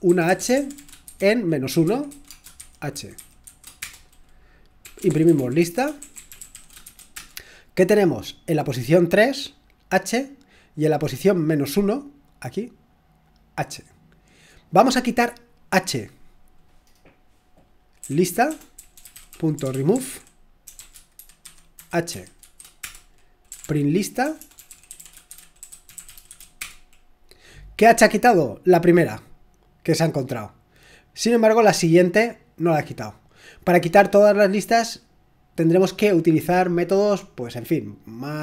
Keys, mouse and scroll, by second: 0.0-3.8 typing, 4.8-7.1 typing, 13.4 click, 17.8-26.8 typing, 29.5-35.0 drag.